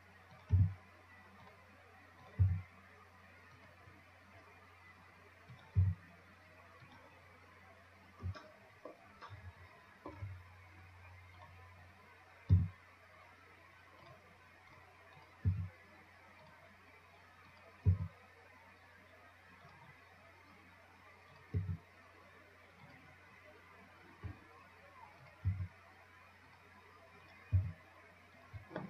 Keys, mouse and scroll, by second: 0.6 click, 0.8 g, 2.5 click, 2.7 g, 5.8 click, 6.0 g, 7.5 scroll up 2, 8.0 scroll down 3, 8.9-10.4 shift+middle drag, 10.4 shift+scroll down 1, 10.7-11.6 scroll up 1, 11.6 click, 14.3-15.4 right drag, 15.4 click, 17.7 click, 21.5 click, 23.7 scroll down 2, 25.5 click, 27.5 click.